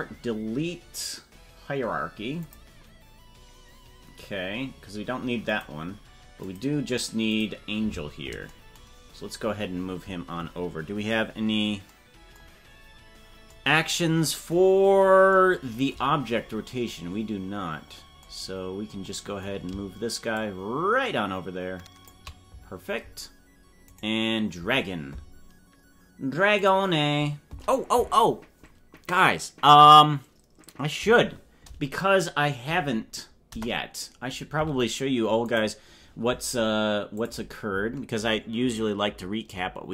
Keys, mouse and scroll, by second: 5.5 click, 6.4 click, 7.3 click, 8.9-9.6 scroll down 8, 11.9 scroll down 6, 16.5 scroll down 2, 18.5 scroll down 3, 20.4-22.6 shift+drag, 24.1-26.6 right drag, 26.6 click, 33.5 KP_0, 35.6 click, 37.2 click.